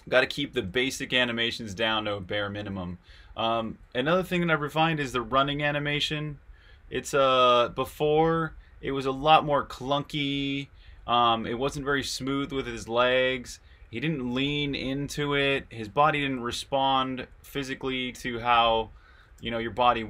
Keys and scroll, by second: 0.0-20.0 typing.